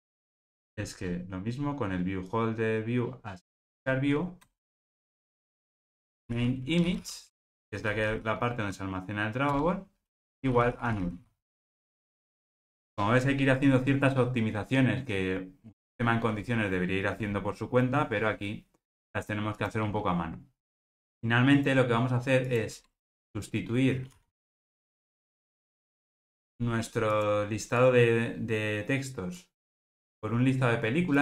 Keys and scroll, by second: 0.4 super+v, 9.5 Return, 11.7 alt+super+l.